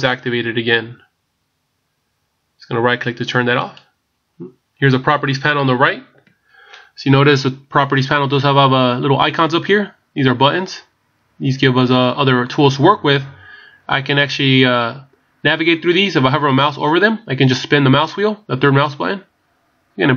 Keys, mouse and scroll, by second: 18.4 scroll down 1.